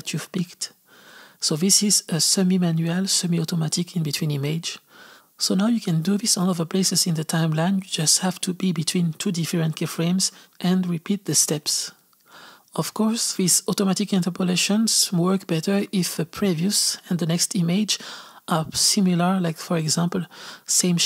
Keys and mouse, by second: 0.6-8.6 drag, 13.4-17.2 drag, 20.4-21.0 drag.